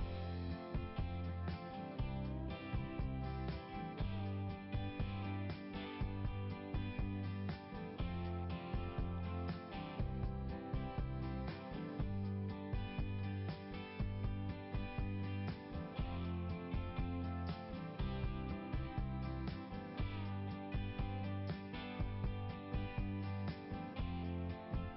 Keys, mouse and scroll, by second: 1.6 click, 1.9 click, 4.5 click, 5.1 scroll up 1, 9.2 click, 9.5 click, 11.3 scroll up 1, 12.0 click, 13.5 click, 16.0 click, 16.2 click, 17.6 click, 24.4-24.9 scroll down 1.